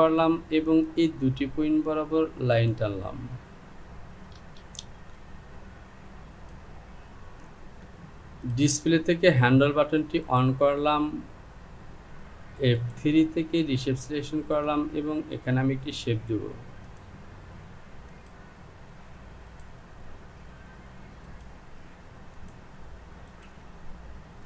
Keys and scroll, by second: 4.6 Return.